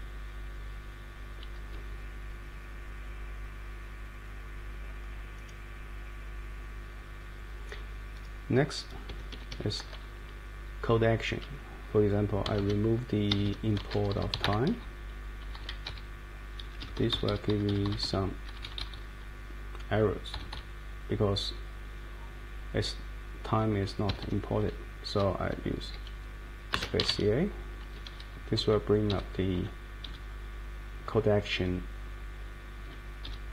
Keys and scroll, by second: 0.0 Down, 0.1 Down, 0.1-1.2 Down, 1.3 Down, 9.1 Escape, 9.3 Escape, 9.5 Escape, 12.4 d, 12.6 d, 13.3 Escape, 13.4 Escape, 13.8-14.8 typing, 15.4 Down, 15.9 Page_Down, 16.6 Up, 17.3 Up, 17.5 Down, 20.3 Left, 20.5 Left, 24.1 Escape, 26.7-27.5 typing, 28.6 Down, 29.1 Up, 29.5 Down, 30.0 Up, 32.8 Down, 33.2 Up.